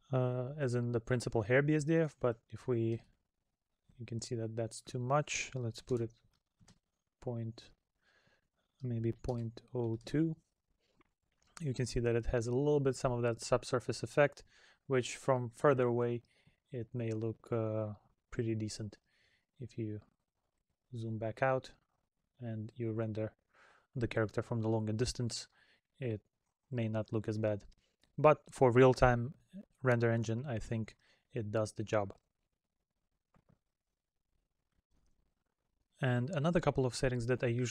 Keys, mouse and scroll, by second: 18.2 middle click, 20.8 middle click, 24.5 middle click, 26.4 middle click, 27.7 middle click, 29.4 middle click, 31.4 middle click.